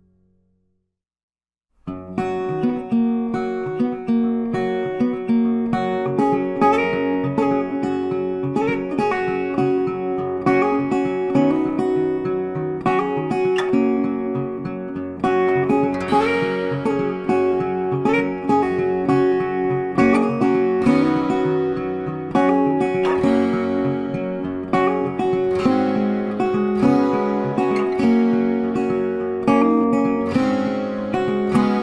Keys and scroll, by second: 14.8 ctrl+t, 23.7 ctrl+d.